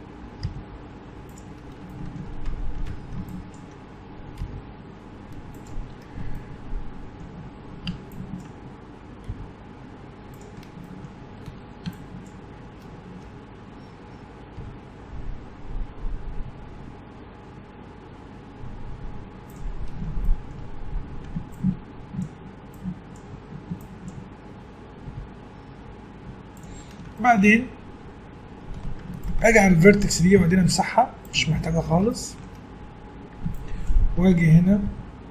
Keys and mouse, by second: 0.4 g, 2.9 a, 3.3 right click, 3.5 click, 4.4 g, 8.1-10.5 drag, 9.3 g, 11.5 a, 12.0-13.3 drag, 13.3 right click, 13.7 middle click, 14.6 g, 20.7 middle click, 21.1 click, 21.6-25.1 drag, 25.1 g, 26.8 middle click, 28.8 a, 30.4 x, 33.5-35.3 drag, 34.9 g.